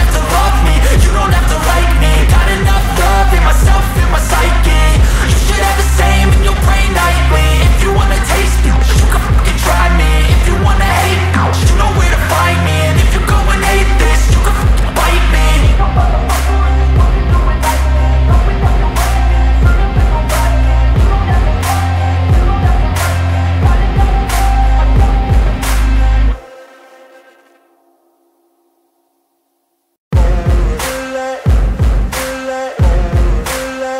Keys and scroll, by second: 1.9 ctrl+space, 2.7 ctrl+space, 4.6 ctrl+alt+space, 11.8 ctrl+t, 19.6 ctrl+space, 26.3 ctrl+space, 32.0 ].